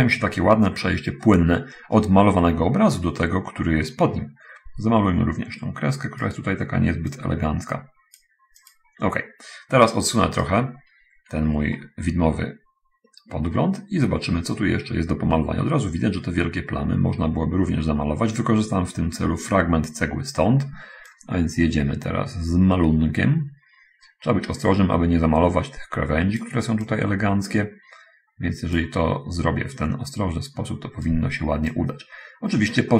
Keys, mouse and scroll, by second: 0.3-2.0 middle drag, 2.4-6.8 right drag, 7.2-9.0 drag, 10.2-11.0 right drag, 11.0 middle click, 11.3-11.7 scroll down 2, 11.8-13.1 middle drag, 13.6 middle click, 14.5-19.4 right drag, 21.5-26.7 drag, 27.2-29.4 drag, 29.8-31.2 right drag, 32.2-32.9 drag.